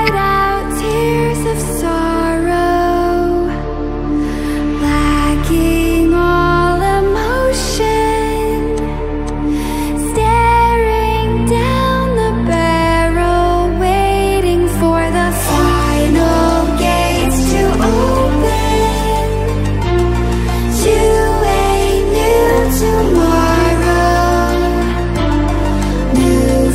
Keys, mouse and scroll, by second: 0.0 v, 0.8-3.7 drag, 4.0 scroll up 1, 5.7 click, 7.7 click, 12.4-17.7 drag, 17.7-18.5 alt+drag, 22.5-26.7 drag.